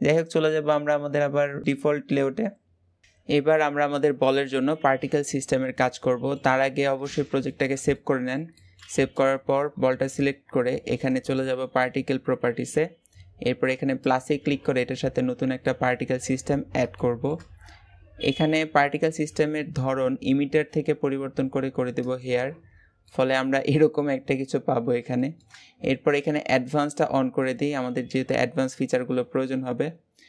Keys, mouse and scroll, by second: 0.0 click, 1.0-1.4 scroll down 2, 1.4 shift+middle click, 1.7-2.2 scroll up 1, 2.2-8.9 middle drag, 8.9 click, 13.9-16.7 drag, 16.7 shift+middle click, 17.4-21.0 scroll up 1, 21.8 click, 22.5-22.9 scroll down 2, 22.9-24.1 middle drag, 24.1-25.0 scroll up 5, 25.0 shift+middle click, 25.4 scroll up 1, 26.7 click.